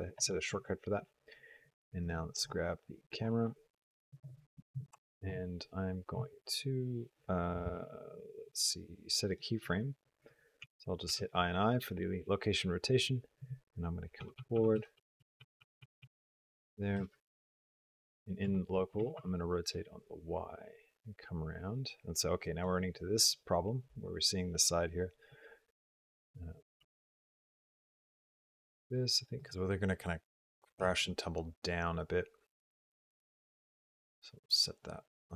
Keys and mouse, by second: 1.9 click, 10.4 i, 10.9 i, 14.1 Right, 14.3 Right, 14.4 Right, 14.7 Right, 14.9 Right, 15.1 Right, 15.3 Right, 15.5 Right, 15.7 Right, 15.9 Right, 16.9 r, 18.8 r, 26.6 r, 30.6 r.